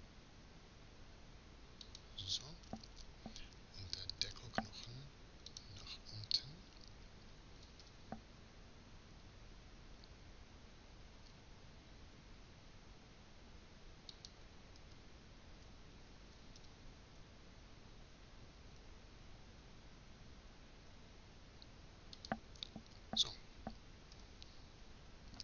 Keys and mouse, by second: 2.3-5.1 middle drag, 5.1-7.2 drag, 7.2 r, 14.5 z, 22.6-23.8 middle drag, 23.8 z, 25.3 KP_1.